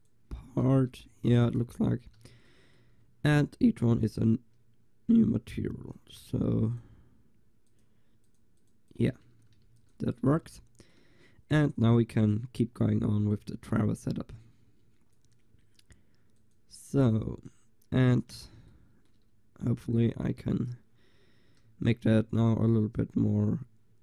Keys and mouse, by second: 0.5 a, 0.8 Tab, 1.3 ctrl+s, 2.6-3.9 middle drag, 6.0-12.2 drag, 9.7 ctrl+s, 13.0 middle click, 13.2 middle click, 13.4-15.5 drag, 16.4-18.5 drag, 18.5-20.8 middle drag, 22.9-24.0 middle drag.